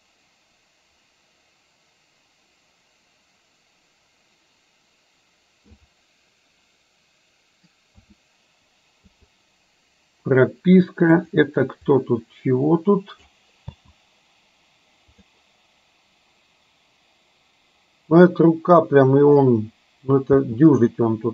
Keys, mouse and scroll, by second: 7.9 a, 9.2 i, 11.3 click, 11.9-13.4 drag, 13.7 space, 15.2 click, 20.4 space.